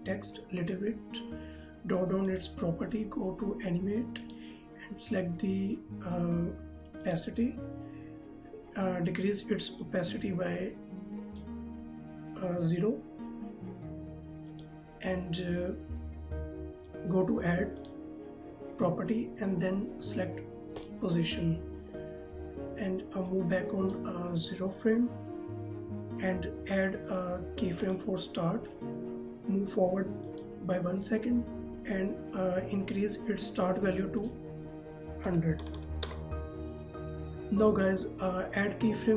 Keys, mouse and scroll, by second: 2.3 click, 7.2 click, 10.0 click, 14.6 click, 18.0 click, 20.9 click, 23.5 click, 28.0 click, 34.3 click, 35.4 KP_1, 35.8 KP_0, 36.2 KP_Enter.